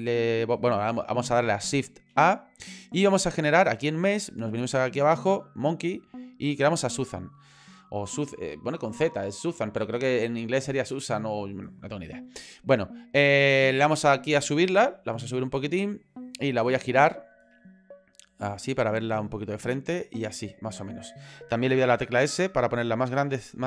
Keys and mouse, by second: 2.1 shift+a, 15.0 click, 17.9-19.5 drag, 20.0 click, 22.2 s.